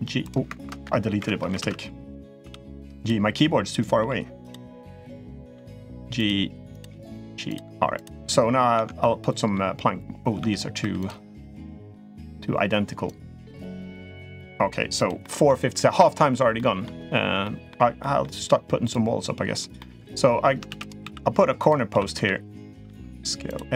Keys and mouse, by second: 0.3-0.9 ctrl+right drag, 0.9 Escape, 1.4 ctrl+z, 2.2 g, 3.5 click, 3.8 g, 4.9 click, 5.3 g, 6.5 click, 6.6 g, 7.7 click, 8.5 Tab, 8.8-9.3 middle drag, 10.1 Tab, 10.6 3, 10.8 click, 11.3 click, 12.0 click, 12.8 click, 13.7 click, 13.9 g, 15.0-15.3 middle drag, 15.5-15.9 middle drag, 16.3 middle click, 17.2 middle drag, 17.7 middle drag, 18.6 click, 19.5 middle drag, 20.4 shift+d, 20.8 s, 21.7 s.